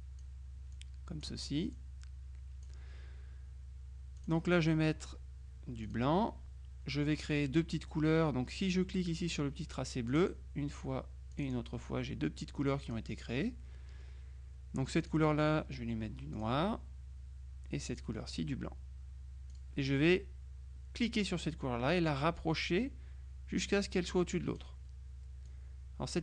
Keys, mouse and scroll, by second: 4.2 click, 5.9 click, 10.2 click, 11.4 click, 12.9 click, 15.1 click, 16.4 click, 18.0 click, 19.6 click, 21.7-25.2 drag, 25.6-26.2 drag.